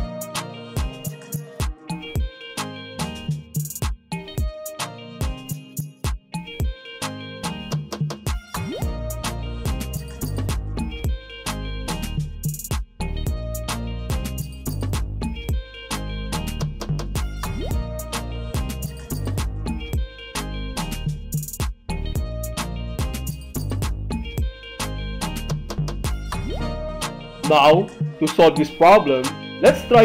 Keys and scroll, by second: 10.4 alt+shift+Num_Lock, 19.4 alt+shift+Print.